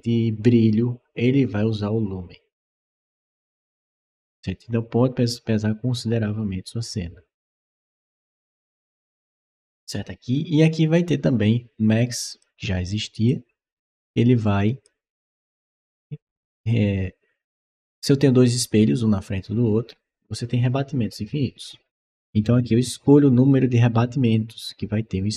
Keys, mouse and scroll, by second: 12.1 click, 13.1-14.7 drag.